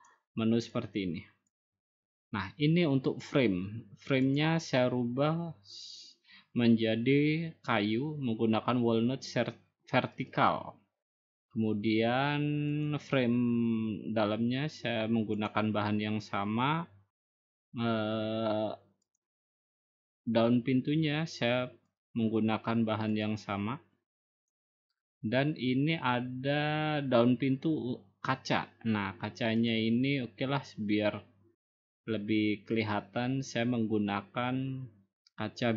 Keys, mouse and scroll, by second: 1.5-2.7 drag, 2.9-4.0 drag, 5.8-7.0 drag, 11.7-12.8 drag, 14.3-15.4 drag, 16.9-18.0 drag, 20.6-21.7 drag, 23.4-24.5 drag, 24.6-25.7 drag, 25.9-27.1 drag, 31.1-32.2 drag.